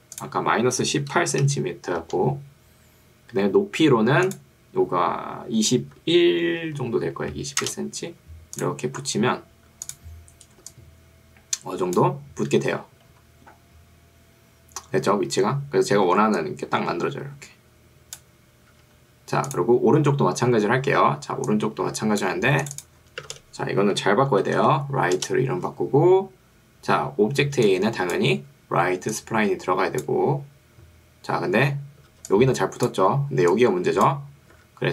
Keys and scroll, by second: 1.6 8, 2.0 Return, 6.0 2, 6.8 1, 7.8 Return, 10.8 3, 16.2 ctrl+2, 18.8 Escape, 23.4 shift+r, 24.0 i, 24.4 g, 24.6 t, 25.2 Return, 27.6 ctrl+2, 28.4 Escape, 32.2 ctrl+2, 34.6 Escape.